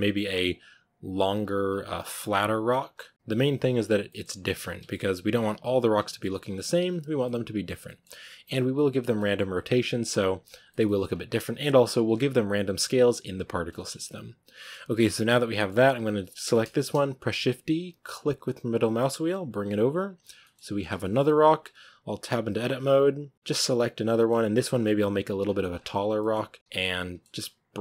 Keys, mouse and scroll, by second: 0.2 g, 1.2 right click, 1.3 g, 2.5 right click, 2.7 g, 3.5 right click, 3.6 g, 3.9 middle click, 4.2 Tab, 4.7 Tab, 4.8 middle click, 5.3 right click, 5.4 g, 5.9 middle click, 6.1 scroll up 1, 6.4 g, 6.8 right drag, 7.1-8.3 middle drag, 8.3 right click, 8.5 g, 9.0 scroll down 1, 9.0-9.8 middle drag, 9.8 right click, 10.2 g, 10.6-10.9 shift+middle drag, 10.9 scroll up 2, 11.8 right click, 12.1 g, 13.8 Tab, 13.8 scroll down 3, 13.9-16.3 middle drag, 16.3 right drag, 16.5-17.2 shift+middle drag, 17.2 shift+d, 20.3-21.0 middle drag, 21.0 scroll up 4, 22.1 Tab, 23.3 right click, 23.4-24.7 middle drag, 24.7 scroll down 1, 24.8 g, 26.1 middle click, 26.5 g, 26.8 middle click, 27.5 right click, 27.6 g.